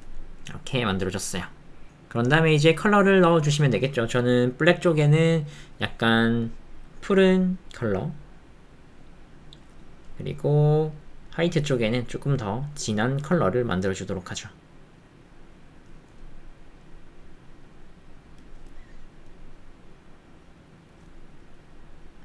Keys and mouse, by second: 0.6 click, 17.9 click.